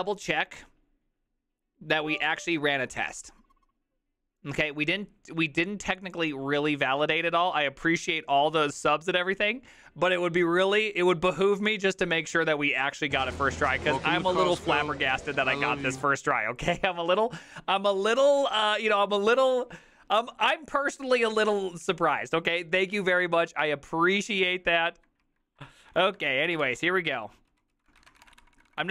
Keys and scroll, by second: 25.3 alt+{, 26.0-28.9 typing, 27.3 ctrl+u, 27.6 ctrl+u, 27.8 ctrl+u, 28.7 ctrl+d.